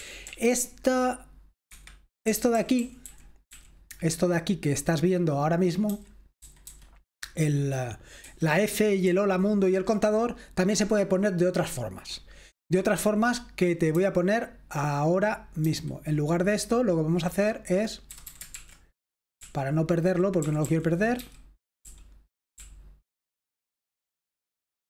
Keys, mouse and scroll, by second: 0.0-0.4 typing, 1.7 Escape, 2.2-3.0 typing, 5.9-6.6 typing, 8.8-9.7 typing, 13.9-14.7 typing, 18.1-20.0 typing, 21.1-23.5 typing.